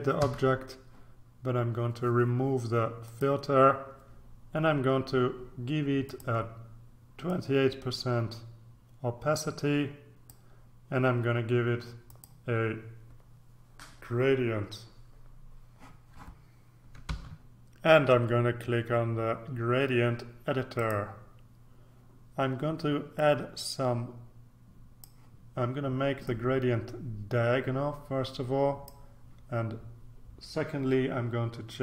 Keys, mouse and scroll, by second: 0.2 ctrl+d, 3.0 click, 6.1 click, 7.3-10.8 drag, 12.0 click, 17.3 ctrl+r, 20.8 click, 23.1-25.6 drag, 26.2-29.4 drag.